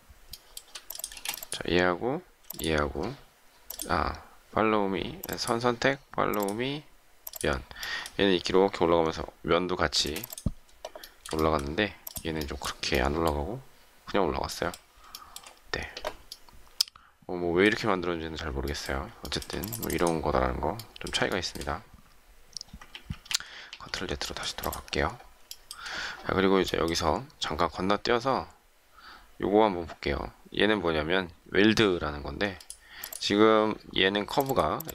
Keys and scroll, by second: 1.1 shift+space, 10.0 space, 22.8 ctrl+z.